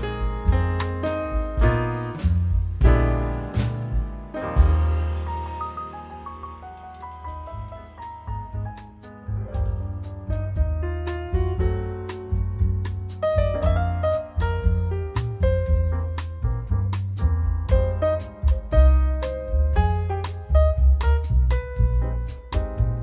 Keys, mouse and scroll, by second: 0.4 0, 1.0-1.4 scroll down 1, 3.0 click, 4.5 ctrl+click, 5.8 click, 6.5 click, 7.8 click, 8.3 click, 9.0 ctrl+click, 9.7 ctrl+click, 10.7 click, 12.1-13.7 drag, 15.6 scroll down 1, 16.1 scroll up 1, 16.6-19.6 drag, 19.5 0, 20.5-20.8 scroll up 1, 21.2-21.6 scroll down 1, 21.9 scroll up 1.